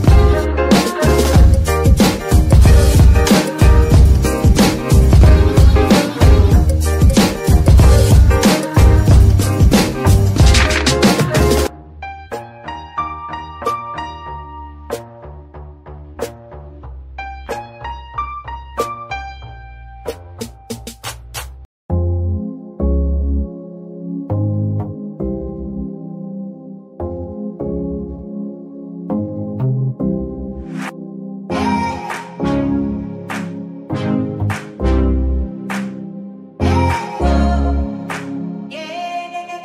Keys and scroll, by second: 2.7 z, 10.8 KP_Divide, 18.7 KP_Divide, 32.1 g, 37.8 Escape.